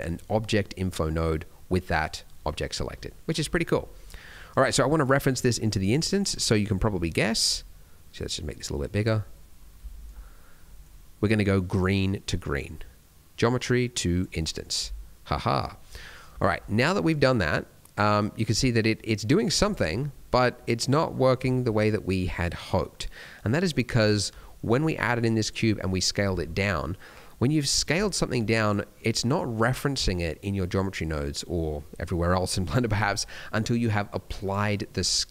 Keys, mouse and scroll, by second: 3.5-3.8 scroll down 1, 3.8 middle click, 4.3 click, 5.6 middle click, 6.0 middle click, 6.4-7.2 scroll up 2, 7.2 middle click, 8.6 click, 9.3-9.6 scroll up 4, 9.8 shift+middle click, 10.4 scroll down 1, 10.6 middle click, 10.8 scroll up 1, 11.7 click, 14.8 scroll down 2, 15.2 middle click, 15.6 scroll up 1, 15.9 middle click, 16.4 shift+middle click, 16.6 scroll up 1, 16.9 middle click, 19.6 click, 19.9 scroll down 1, 20.1 middle click, 21.4 shift+middle click, 21.7 scroll up 2, 22.0 middle click, 24.0 shift+middle click, 25.3 click, 26.4 middle click, 28.6 click, 34.3 click.